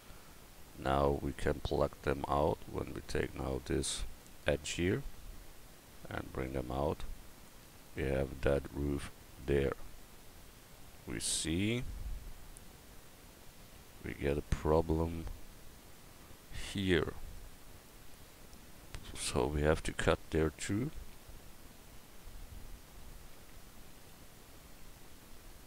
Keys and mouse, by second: 4.2 middle click, 4.6 middle click, 4.8 middle click, 5.0 middle click, 21.2 KP_4, 23.9 Down, 24.1 Up, 24.8 Up.